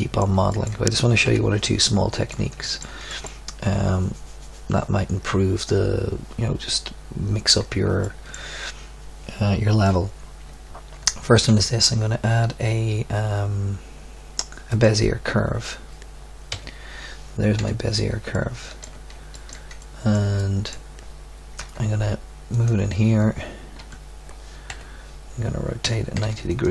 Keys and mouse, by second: 1.2 KP_1, 11.3 shift+a, 16.5 z, 17.5 KP_7, 21.5 g, 22.1 click, 23.1 Tab, 23.8 Tab, 24.7 KP_1, 25.8 r.